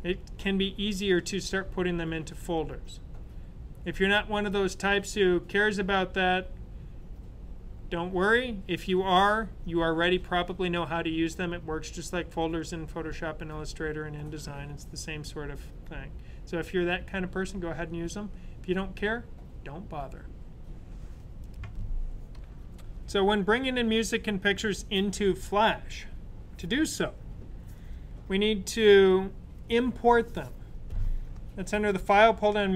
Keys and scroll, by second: 22.5 typing.